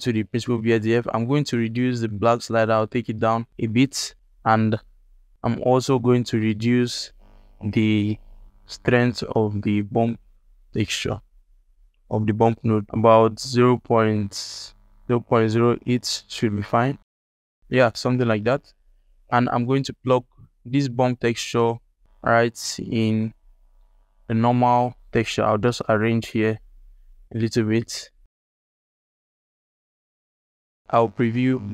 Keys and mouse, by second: 0.8-1.5 drag, 1.5-3.2 middle drag, 3.9-4.7 ctrl+alt+drag, 4.7-5.0 ctrl+alt+middle drag, 5.0 ctrl+alt+click, 5.5 ctrl+alt+click, 6.2 alt+shift+click, 7.1-8.3 drag, 9.1-13.3 drag, 13.9-15.9 drag, 17.0 ctrl+alt+click, 17.9 ctrl+alt+middle click, 18.6 alt+shift+middle click, 18.9 ctrl+alt+middle click, 19.6 click, 20.3-20.6 drag, 20.9 g, 22.0 ctrl+alt+middle click, 22.7-23.5 drag, 23.9 ctrl+alt+middle click, 24.5 alt+shift+middle click, 25.1-25.6 drag, 25.8 g, 27.9 g, 28.6 click, 29.1 g, 29.3 g, 30.0 alt+shift+middle click, 30.2 ctrl+alt+middle click, 30.2 click, 30.3 alt+shift+click, 30.5 ctrl+alt+click, 30.6 alt+shift+click, 31.5 ctrl+shift+click.